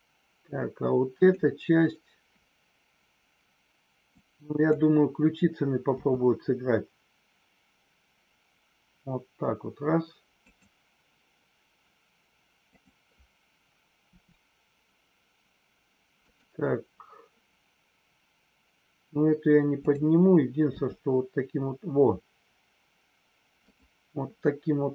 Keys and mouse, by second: 1.2 click, 4.1-4.7 drag, 10.4 click, 14.1 r, 16.2 click, 19.7-20.4 drag, 23.6 click.